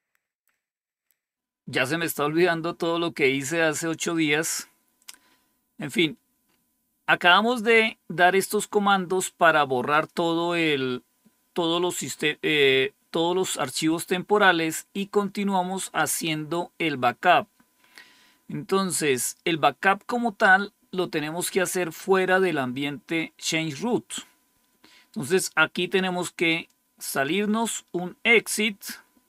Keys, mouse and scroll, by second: 1.0-4.6 scroll up 2, 4.6-5.6 scroll up 1, 5.6-6.4 scroll up 1, 6.4-9.8 scroll up 1, 9.8-10.8 drag, 14.0-15.5 scroll down 2, 15.5-16.1 scroll down 1, 16.1-17.9 scroll down 1, 17.9-19.0 scroll down 1, 19.0-21.4 scroll down 1, 26.6 click.